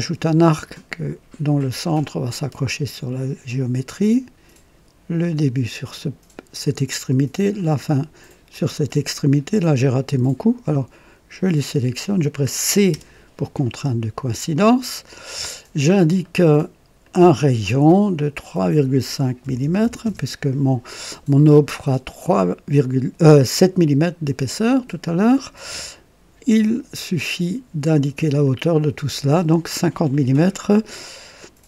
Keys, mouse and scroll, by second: 2.2 click, 5.3 click, 7.5 click, 8.7 scroll up 1, 9.1 right click, 9.7 right click, 10.7-11.7 drag, 12.8-13.8 typing, 13.6-14.3 right drag, 14.4 scroll down 1, 15.0 right click, 16.2 right click, 17.0 click, 18.2 click, 19.4 KP_3, 19.6 KP_Decimal, 20.0 KP_5, 20.1 KP_Enter, 23.5-25.2 drag, 25.4 scroll down 1, 25.9 right click, 28.4-29.4 drag.